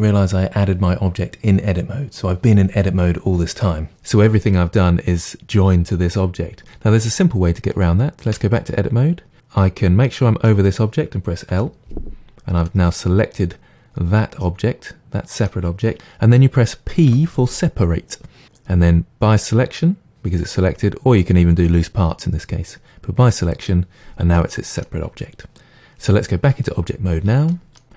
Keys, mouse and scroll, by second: 8.3 Tab, 11.6 l, 17.1 p, 24.4-27.5 middle drag.